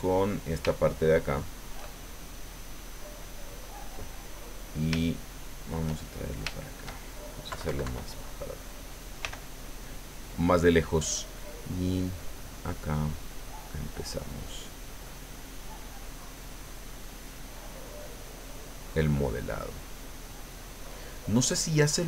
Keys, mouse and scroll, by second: 0.1 shift+middle click, 0.7 shift+middle click, 4.9-6.5 shift+middle drag, 7.5 KP_Subtract, 9.2 f, 10.3 click, 11.6-15.2 drag, 15.3 middle click, 16.4-18.7 drag, 18.8 middle click, 19.2-20.7 drag, 20.7 middle click, 21.5-22.0 drag.